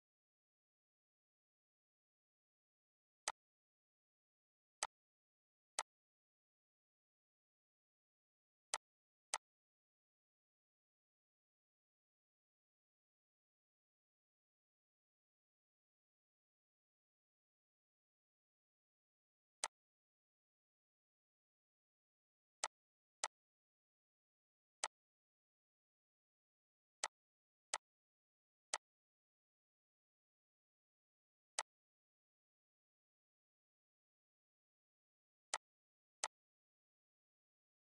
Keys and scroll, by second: 9.0 -, 19.7 1, 20.7 Delete, 22.4 3, 23.3 ctrl+d, 25.3 ctrl+d, 26.0 ctrl+d, 29.8 -, 30.6 ctrl+d, 31.5 ctrl+d, 33.3 ctrl+s.